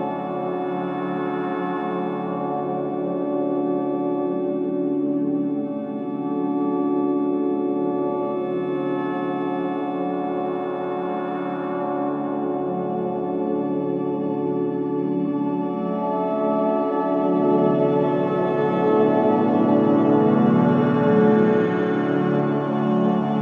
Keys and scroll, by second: 1.7 ], 2.1 4, 4.8 3, 6.4 F9, 12.0 ], 12.7 Delete, 13.1 ], 17.1 ,, 22.6 F1.